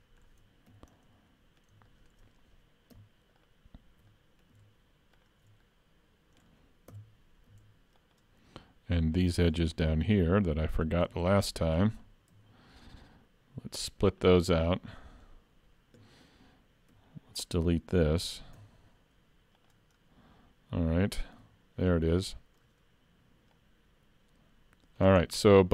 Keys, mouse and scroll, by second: 0.0 shift+middle click, 0.7 2, 1.0 middle click, 1.9 shift+middle click, 3.4 alt+click, 4.1 middle click, 5.2 alt+shift+click, 5.7 middle click, 6.9 KP_Decimal, 8.0 alt+shift+click, 9.6 middle click, 10.8 alt+shift+click, 11.1 scroll up 1, 11.2 middle click, 12.4 ctrl+e, 14.7 middle click, 16.9 3, 17.4 click, 18.6 x, 20.0-20.4 scroll down 3, 21.4 l, 21.9 middle click, 23.6 click, 25.3 middle click.